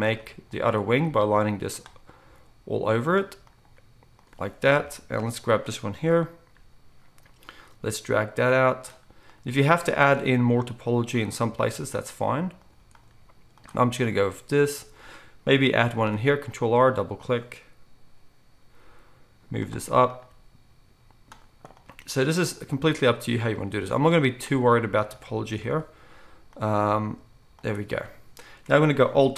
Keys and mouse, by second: 2.2 g, 3.6 g, 9.4 g, 11.7 g, 14.1 g, 15.9 ctrl+r, 17.2-18.8 drag, 18.8-29.3 middle drag, 18.8 g, 20.3 g, 22.8 g, 23.7 g, 26.7 g.